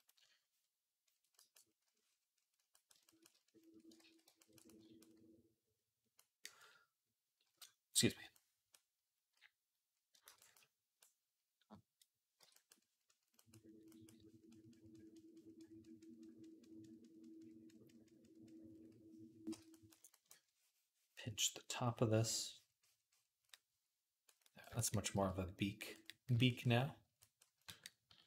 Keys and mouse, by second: 3.8 ctrl+z, 11.4-24.3 drag, 12.2 j, 25.0 v, 27.9 d.